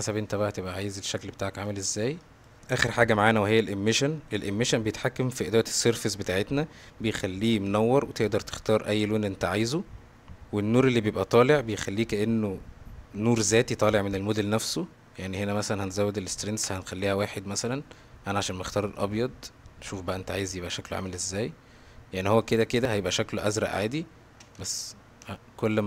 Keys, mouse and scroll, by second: 2.3 click, 5.3 middle click, 7.3 middle click, 8.3 click, 9.5 click, 15.5-16.6 drag, 22.9 click, 23.5 middle click, 24.9-25.8 shift+drag.